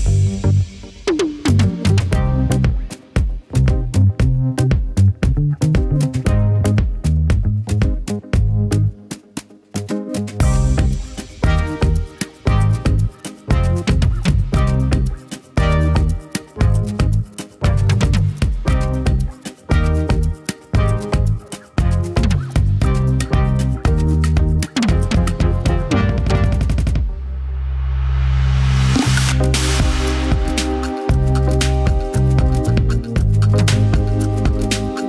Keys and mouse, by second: 12.7 n, 12.9 z, 13.1 click, 13.4 click, 13.6 middle click, 14.2 middle click, 14.4 g, 14.6 r, 15.0 r, 15.4 ctrl+s.